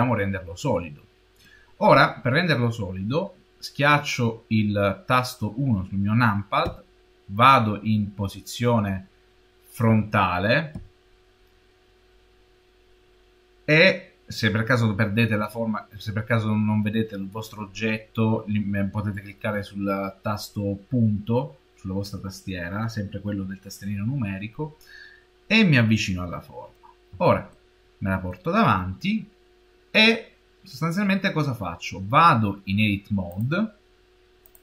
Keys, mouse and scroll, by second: 0.0 Tab, 6.5 KP_1, 9.1 scroll down 3, 9.7 KP_1, 10.6 KP_Decimal, 24.9 scroll up 5, 27.4 shift+middle click, 33.1 click.